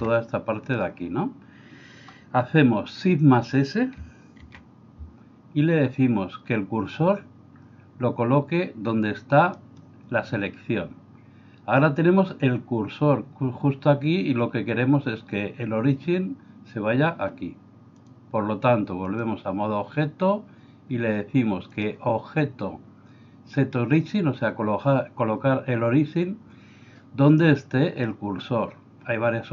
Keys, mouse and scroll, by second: 0.0 b, 4.5 shift+s, 18.0-19.3 drag, 21.8-29.5 drag.